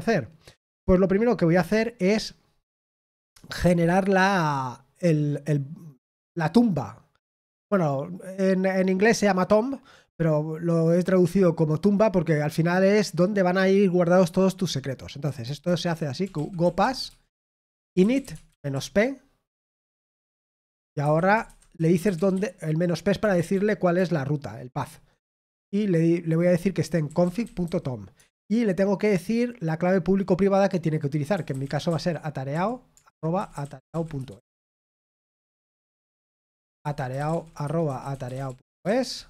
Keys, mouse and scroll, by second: 21.1-22.5 typing, 23.7-25.3 typing, 38.1-38.8 typing.